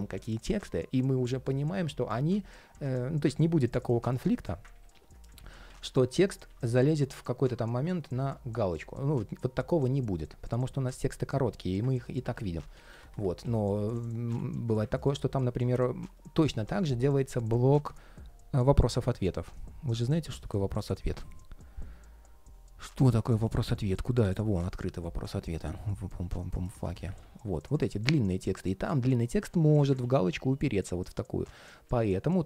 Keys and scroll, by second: 4.4 super+a, 4.6 super+c, 5.1 super+v, 5.4 super+v, 6.2 super+z, 13.5 super+z, 29.7 super+z.